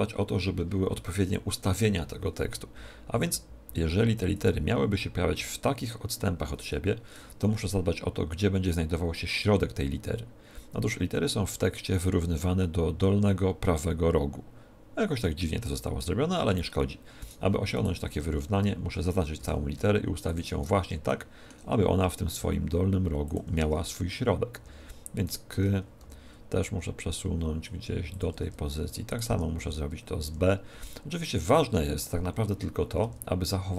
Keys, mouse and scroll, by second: 3.1-5.1 drag, 17.1-19.5 right drag, 18.1 Tab, 18.5 a, 19.3 g, 20.3-21.9 drag, 21.1-22.6 middle drag, 21.9 g, 23.3-25.2 drag, 24.5 Tab, 25.2 right click, 25.5 Tab, 25.9 a, 26.5 g, 28.1-29.9 drag, 28.3 Tab, 29.1 right click, 29.2 Tab, 29.5 a, 30.1 g, 31.4-33.2 drag, 32.1 a, 33.0 Tab.